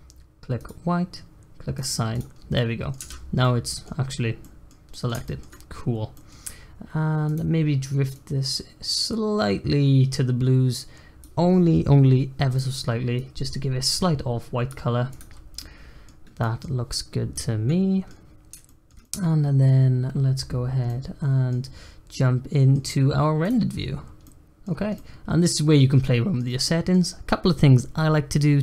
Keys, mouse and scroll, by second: 0.5 click, 1.7 click, 2.3 scroll down 3, 2.5 middle click, 3.0 Tab, 3.1 scroll up 1, 3.4 middle click, 4.0-4.4 scroll up 1, 4.4-5.9 middle drag, 5.9 scroll up 1, 6.1 middle click, 6.5-7.2 scroll up 1, 7.2 click, 15.1 click, 15.2 scroll down 1, 15.5-16.8 middle drag, 16.8-17.3 scroll up 1, 17.3 middle click, 18.2-18.6 scroll up 1, 18.6-20.6 shift+middle drag, 20.6 scroll down 2, 20.8-21.6 middle drag, 21.6-22.1 scroll up 4, 22.1-22.7 middle drag, 22.7-23.6 scroll up 1, 23.6 click, 24.0 scroll down 2, 24.2-24.7 middle drag, 24.7 scroll down 1, 24.9-25.7 middle drag, 25.7-26.6 scroll up 4, 26.0-26.3 middle drag, 26.6-28.6 middle drag.